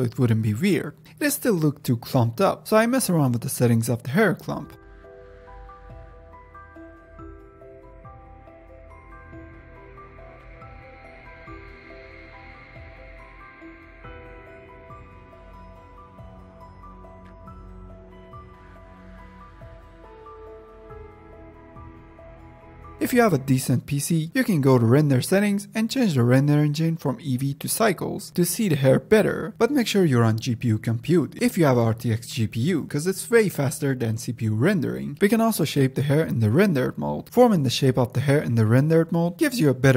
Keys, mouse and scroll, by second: 1.8 click, 1.9-2.5 scroll down 1, 2.5 click, 2.9-3.5 scroll down 3, 3.5-4.5 drag, 5.2 click, 5.5 ctrl+Tab, 5.7 g, 5.8 f, 6.2-7.5 drag, 7.5 ctrl+Tab, 7.8 click, 8.0 middle click, 8.1 scroll down 1, 8.3 middle click, 8.5-10.4 drag, 10.9-11.6 middle drag, 11.6-13.1 drag, 15.1-16.2 drag, 16.4 scroll up 2, 17.0-17.8 scroll down 9, 17.8 click, 21.4 click, 21.6-22.1 middle drag, 22.1-22.9 drag, 22.9-24.3 scroll down 3, 24.3 click, 24.8 click, 25.2 click, 25.6 click, 25.9-27.8 drag, 27.8-28.2 scroll up 2, 29.0-30.3 middle drag, 30.3-30.7 scroll down 2, 31.3-33.2 shift+middle drag, 33.2 scroll down 1, 33.3 ctrl+Tab, 33.6 g, 33.7 f, 33.9-36.1 drag, 36.1-36.5 middle drag, 36.5-37.7 drag, 37.7 ctrl+Tab, 38.0 middle drag, 38.3 scroll down 1, 38.5-39.3 middle drag, 39.3 scroll down 2, 39.6-39.9 shift+middle drag.